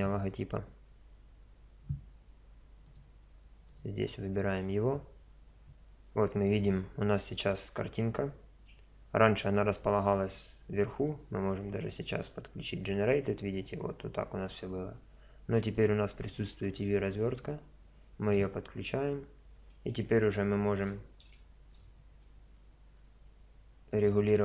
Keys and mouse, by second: 20.8 a, 21.2 a, 23.0 s.